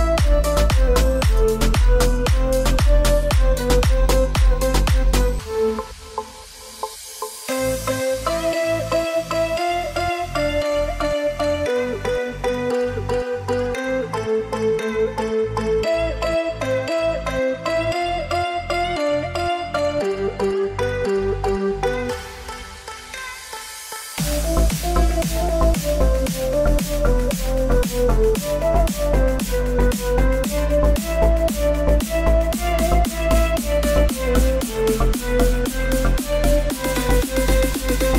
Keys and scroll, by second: 3.2 ctrl+j, 3.2 ctrl+z, 6.6 ctrl+z, 19.7-21.4 typing, 36.2-38.1 typing.